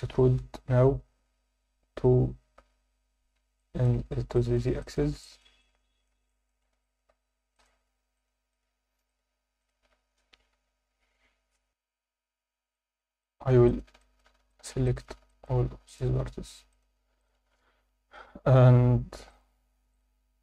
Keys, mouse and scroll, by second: 3.6 alt+middle click, 4.0 scroll down 2, 4.3 shift+middle click, 4.8 ctrl+alt+middle click, 5.2 alt+shift+middle click, 5.6 alt+middle click, 6.3 alt+shift+middle click, 6.8 ctrl+alt+middle click, 7.5 shift+click, 8.2 shift+click, 8.5 shift+click, 9.1 shift+click, 9.6 shift+click, 10.2-10.5 scroll down 1, 10.5 KP_7, 11.6 F9, 11.7 F10, 11.7 shift+click, 11.7 3, 12.7 alt+middle click, 13.2 alt+shift+middle click, 13.7 ctrl+middle click, 14.0 shift+middle click, 14.5 ctrl+alt+middle click, 14.9 alt+shift+middle click, 15.3 ctrl+alt+middle click, 15.9 shift+click, 16.7 shift+click, 17.2 shift+click, 17.7 scroll down 2, 19.3 click.